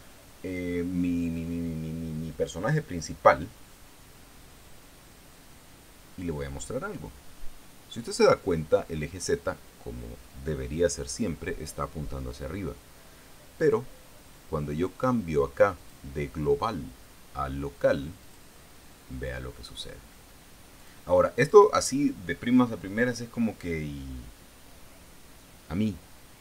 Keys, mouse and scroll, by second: 16.3 click, 18.7 click, 21.3 click, 21.9 click.